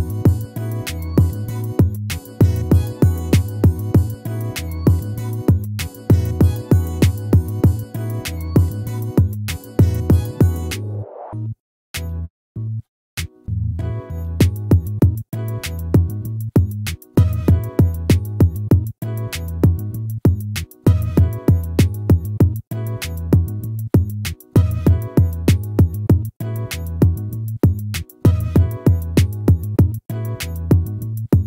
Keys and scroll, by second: 6.9 ctrl+-, 12.0 ctrl++.